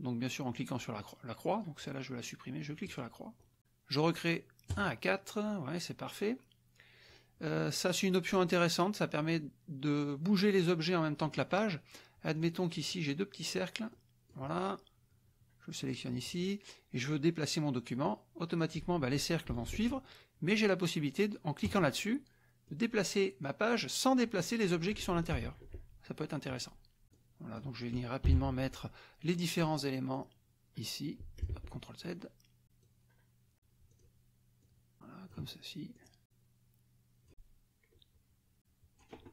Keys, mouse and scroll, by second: 1.5 click, 2.8 click, 4.7 click, 12.4 click, 13.1 click, 13.9 click, 15.8 click, 18.0 click, 19.7 ctrl+z, 21.6 click, 22.7 click, 25.3 ctrl+z, 27.1 click, 28.3 Delete, 29.3 click, 30.1-31.6 drag, 31.6 ctrl+z, 32.8-33.5 drag, 34.0 click, 34.6-35.5 drag, 35.9-39.2 drag.